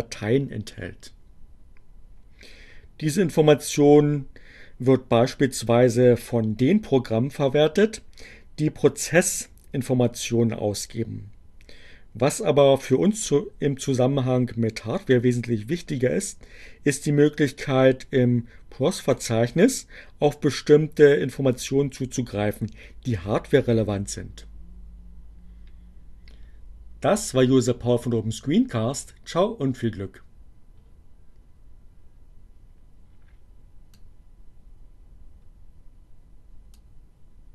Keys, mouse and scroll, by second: 33.6-36.1 drag.